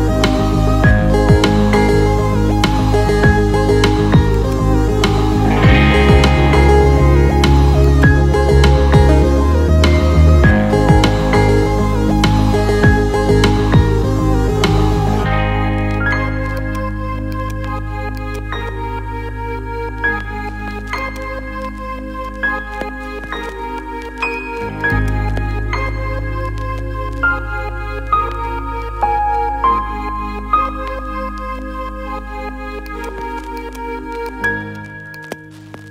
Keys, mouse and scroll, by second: 7.8 click, 9.8-12.1 drag, 12.5-15.8 shift+drag, 16.5 alt+middle click, 17.4 ctrl+alt+middle click, 18.1 alt+middle click, 21.0 click, 22.8 alt+e, 32.9 alt+middle click, 33.9 alt+middle click, 34.3 ctrl+alt+middle click, 35.1-35.9 alt+middle drag.